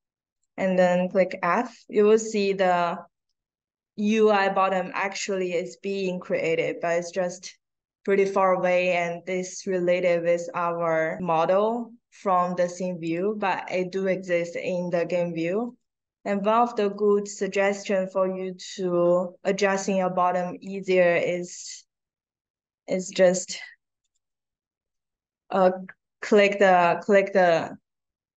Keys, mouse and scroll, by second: 0.2 click, 1.1 f, 1.9 middle click, 2.5 middle click, 3.1-5.1 right drag, 5.4 middle click, 10.9 middle click, 13.0 click, 15.6 click, 16.4-17.1 scroll up 4, 17.3-18.3 scroll down 8, 18.4-19.2 scroll up 2, 20.5 click, 22.7 middle click, 23.9 click, 25.0 scroll down 1.